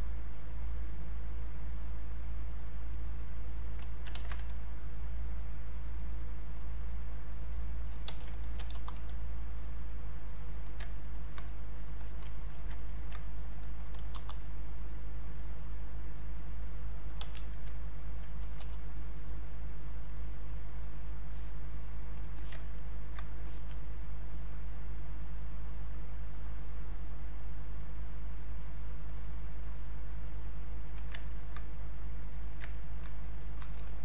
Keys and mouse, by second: 1.6-4.1 ctrl+drag, 4.1 ctrl+z, 5.1-8.1 drag, 8.1 q, 8.4 alt+click, 8.8 r, 9.5-11.0 drag, 11.0 ctrl+right click, 11.4 ctrl+click, 12.5 alt+click, 12.9 ctrl+right click, 13.6 alt+click, 14.1 r, 14.9-17.2 drag, 17.2 q, 18.0 alt+click, 18.6 e, 20.1-22.4 drag, 22.4 alt+click, 22.8 ctrl+right click, 23.5-28.3 alt+drag, 28.3-30.3 drag, 30.3-31.9 drag, 31.9 click, 32.7 ctrl+right click, 33.3 click, 33.4 click, 33.8 alt+click.